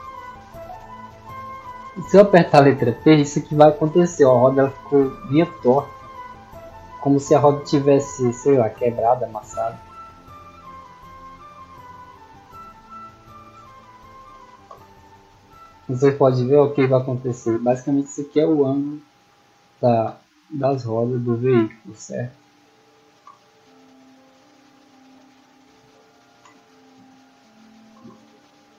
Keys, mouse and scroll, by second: 0.4-2.0 typing, 2.6 scroll up 2, 3.1 shift+middle drag, 6.4-7.4 scroll up 2, 8.0-9.8 typing, 11.4 click, 12.4 drag, 12.9 click, 14.6-16.6 typing, 17.7 w, 18.8 d, 21.9 click, 25.2 click, 28.3-28.7 typing.